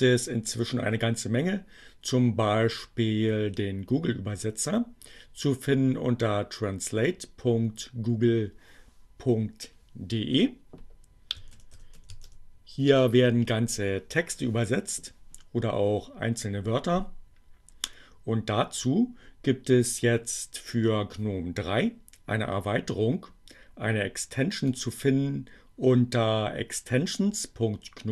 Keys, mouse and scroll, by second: 10.1 click, 10.6-12.5 typing, 13.1 Return, 24.5 click.